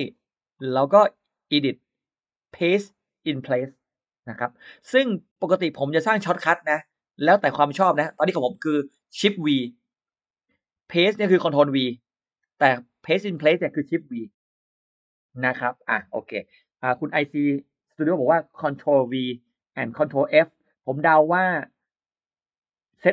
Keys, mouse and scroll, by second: 0.4 click, 1.4 click, 2.7 click, 5.8 click.